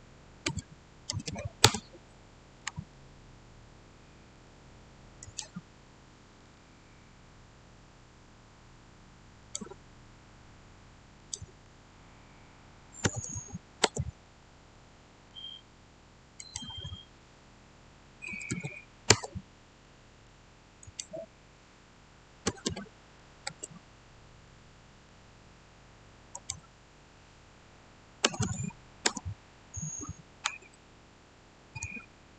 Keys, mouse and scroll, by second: 0.3-1.1 typing, 1.5 Return, 2.8-5.1 shift+middle drag, 5.1 click, 9.3 click, 9.3 click, 13.0 typing, 13.7 Return, 14.5 scroll up 1, 14.6-16.3 middle drag, 16.3 click, 17.9-18.9 typing, 19.0 Return, 19.7 middle click, 20.7 click, 22.3 typing, 23.3 Return, 24.3-26.2 middle drag, 26.2 click, 28.1 typing, 28.9 Return, 30.6-32.3 shift+middle drag.